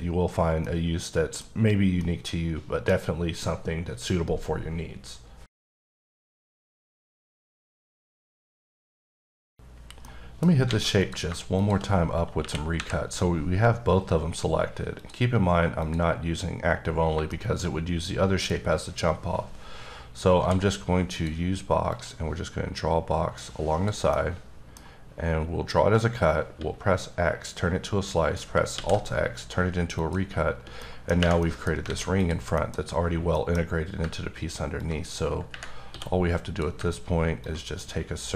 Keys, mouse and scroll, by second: 0.6-1.1 scroll down 1, 2.0 middle click, 10.6 alt+middle click, 10.7 alt+a, 11.0 click, 11.6 click, 12.4 KP_1, 12.7 KP_3, 14.9 click, 15.8 click, 17.3 middle click, 20.3 d, 21.1 click, 21.9 click, 24.1 middle click, 26.5 x, 30.0 click, 30.8 middle click, 31.4 middle click, 31.7 scroll up 1, 31.8 alt+a, 32.2 click, 32.5 middle click, 33.3 middle click, 34.8 ctrl+click, 35.9 d, 37.4 ctrl+click.